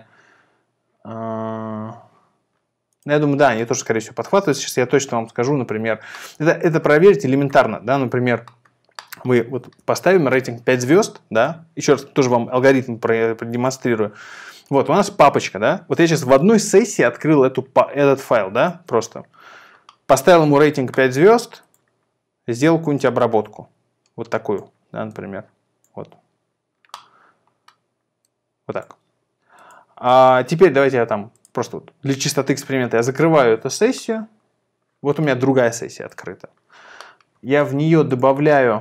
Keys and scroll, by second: 9.8 5, 33.0 super+ц.